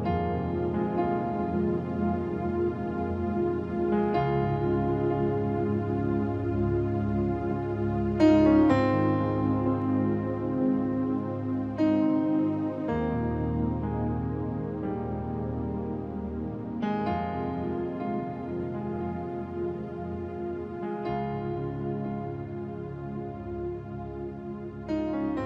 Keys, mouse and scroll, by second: 0.2 Return, 1.3-3.8 drag, 12.1 v, 13.4 ctrl+v, 13.5-16.4 ctrl+drag, 16.4 v, 16.6 click, 17.8 v, 18.1-18.7 scroll down 1, 18.7 click, 22.3-24.1 drag, 24.5-25.4 typing.